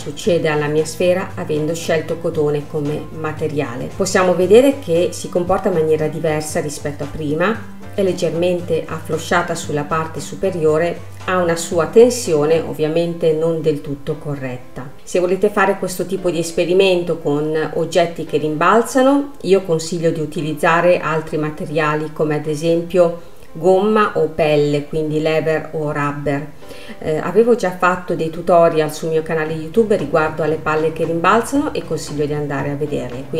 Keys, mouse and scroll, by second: 1.6-3.7 drag, 3.7 scroll down 1, 3.9 space, 5.1 scroll down 1, 5.2-8.2 middle drag, 8.3 scroll up 3, 8.9 scroll down 1, 9.2 middle click, 9.9 space, 12.2 middle click, 12.8 scroll up 2, 14.4 middle click, 15.5-16.7 middle drag, 16.7-17.2 scroll up 5, 17.2 middle click, 18.0 scroll down 1, 18.7-22.5 middle drag, 22.5 click, 23.0-24.0 scroll up 2, 24.0-27.0 middle drag, 33.2-33.3 drag.